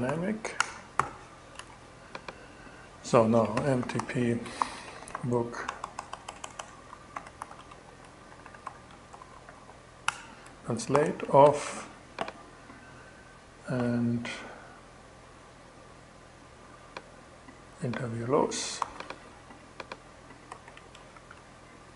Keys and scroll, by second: 0.0 Return, 0.4 alt+g, 1.0 alt+shift+Return, 1.6 shift+Return, 2.8-5.1 typing, 6.4-9.5 typing, 10.4 alt+g, 10.9 alt+shift+g, 11.1 alt+shift+2, 18.2 super+c, 20.4 shift+super+v, 20.6 shift+super+2, 21.2 shift+2, 21.6 shift+super+Tab.